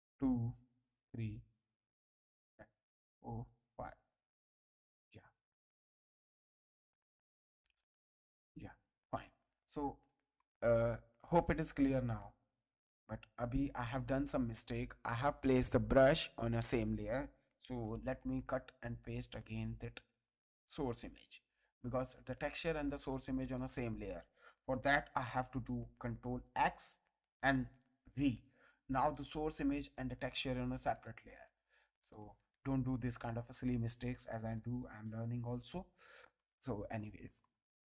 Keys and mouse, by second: 2.8 click, 17.7 m, 19.4 click, 22.9 click, 26.4 ctrl+x, 28.1 ctrl+v, 29.8 click, 32.6 ctrl+t, 33.2 click, 34.5 click.